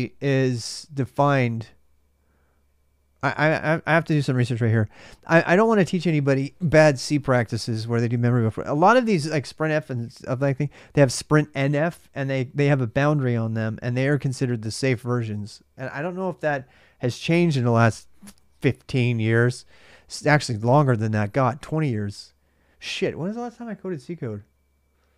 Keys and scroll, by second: 3.9 super+Tab.